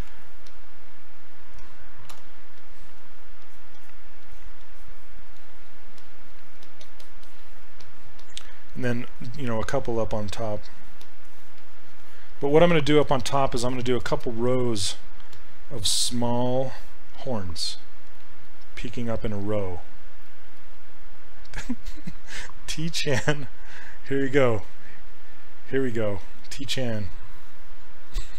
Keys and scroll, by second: 2.1 d, 17.1 s, 24.3 s, 26.3 ctrl+z.